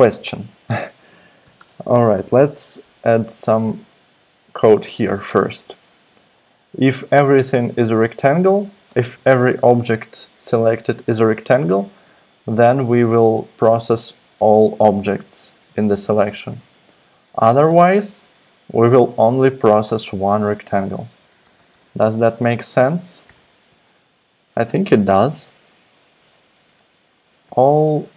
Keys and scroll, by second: 1.1-2.6 typing, 21.4 super+=, 21.5 super+=, 21.8 super+=, 23.3 super+=, 27.0-28.1 typing.